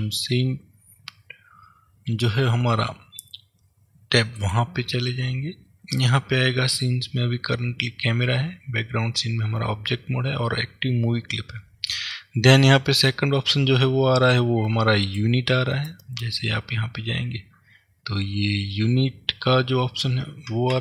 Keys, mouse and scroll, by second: 4.4 click, 15.2 click.